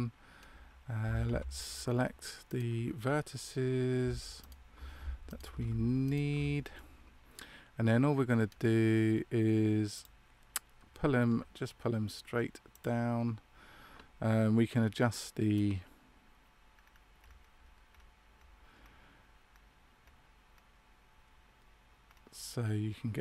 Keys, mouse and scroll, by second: 0.9 a, 2.0 a, 2.4 right click, 4.3 alt+shift+right click, 6.7 middle click, 9.9 click.